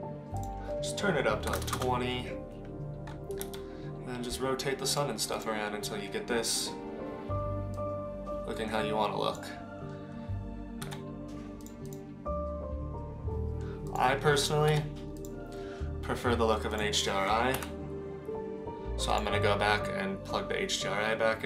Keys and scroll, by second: 3.4 r, 10.8 g, 14.7 g, 17.6 Delete.